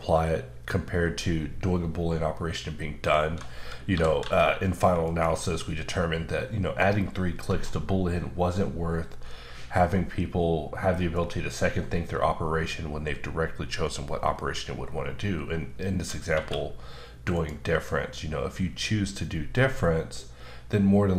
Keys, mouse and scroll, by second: 3.5-3.9 scroll up 1, 3.9-4.2 typing, 5.0 click, 16.4 q, 17.3 click.